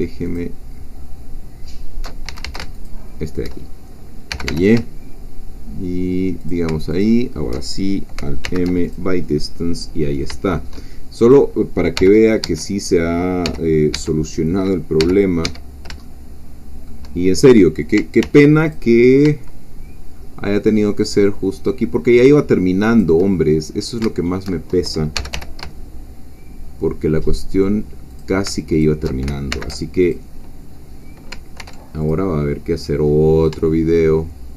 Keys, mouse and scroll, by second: 0.4 alt+shift+click, 2.3 alt+shift+a, 2.7 alt+shift+click, 4.3 g, 4.7 shift+y, 6.4 alt+shift+click, 8.4 alt+m, 8.8 alt+click, 9.9 middle click, 10.4 shift+click, 11.2 click, 12.0 g, 12.4 Escape, 12.8 click, 13.4 g, 14.0 Escape, 14.2 click, 15.0 g, 15.4 Escape, 16.0-17.0 shift+middle drag, 18.2 ctrl+r, 18.7 ctrl+click, 22.9 shift+click, 23.4-24.0 shift+scroll up 3, 25.2 shift+g, 25.3 y, 28.1 shift+click, 28.7 alt+shift+click, 29.5 alt+shift+m, 30.0 alt+click, 31.6 ctrl+r, 32.0 ctrl+click.